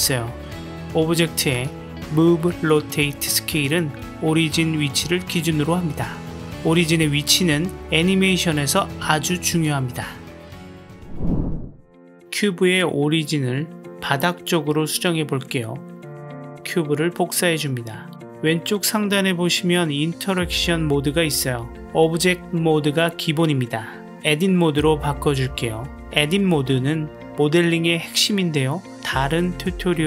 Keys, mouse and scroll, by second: 3.3 r, 6.6 s, 9.0 g, 11.8 click, 14.9 shift+d, 17.8 click, 20.5-24.9 drag.